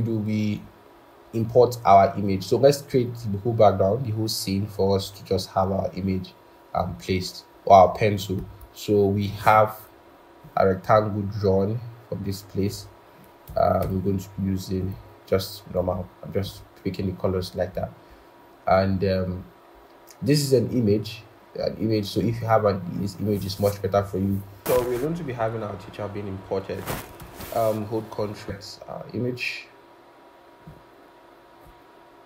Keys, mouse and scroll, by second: 0.6-1.7 scroll, 2.9-3.8 scroll, 7.2-8.4 scroll, 8.4 right click, 13.7 typing, 17.7-18.6 scroll, 24.6-25.7 scroll, 25.7-26.1 scroll up 1, 26.1-26.8 scroll, 27.1 ctrl+shift+p, 28.4 double click.